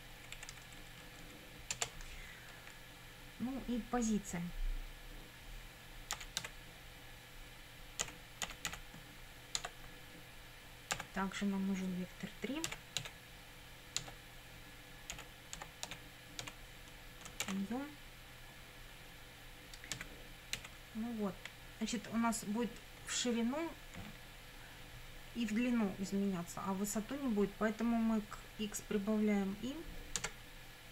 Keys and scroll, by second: 0.4 Right, 1.7 Return, 5.9-9.2 typing, 9.6 Tab, 11.0 =, 12.7 v, 13.0 e, 14.0 Tab, 14.9-16.4 typing, 17.4 shift+9, 19.9 x, 20.6 1.